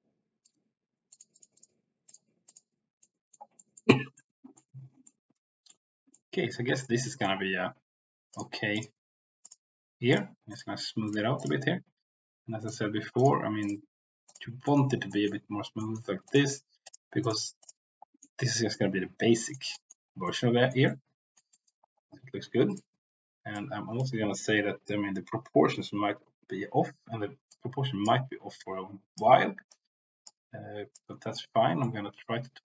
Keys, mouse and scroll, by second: 0.4 click, 1.1 click, 1.3 click, 1.5 click, 2.0 click, 2.4 click, 3.0 middle click, 3.5 middle click, 4.1 middle click, 5.0 middle click, 6.0 middle click, 7.0 middle click, 8.2 click, 9.4 click, 10.5 click, 11.3 click, 12.6 click, 13.1 click, 14.2 click, 14.6 middle click, 15.1 middle click, 15.8 middle click, 16.2 click, 16.8 click, 17.1 click, 17.5 click, 18.1 middle click, 18.7 middle click, 19.7 middle click, 20.2 middle click, 20.8 middle click, 21.5 middle click, 22.6 click, 23.5 click, 27.4 click, 28.5 click, 29.6 click, 30.9 click, 31.8-32.6 middle drag.